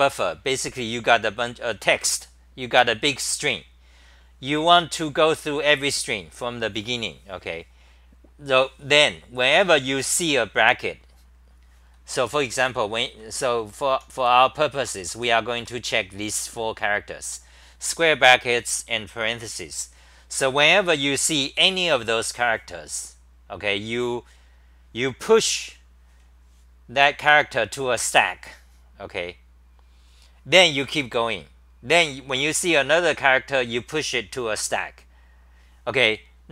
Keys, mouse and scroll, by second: 12.3 ctrl+g, 12.4-16.1 typing.